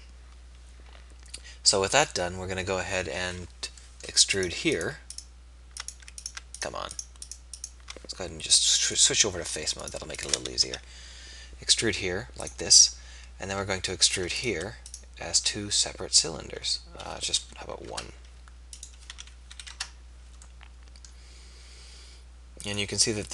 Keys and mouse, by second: 3.3 z, 10.6 e, 15.4 e.